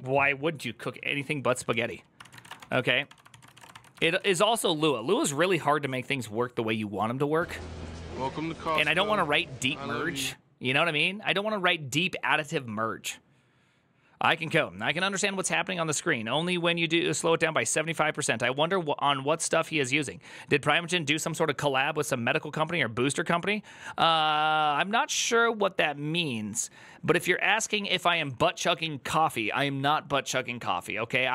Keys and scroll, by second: 2.1 alt+{, 2.1 ctrl+;, 2.4 ctrl+c, 2.4 Return, 2.4 ctrl+d, 2.4 w, 3.1 ctrl+d, 3.1 ctrl+c.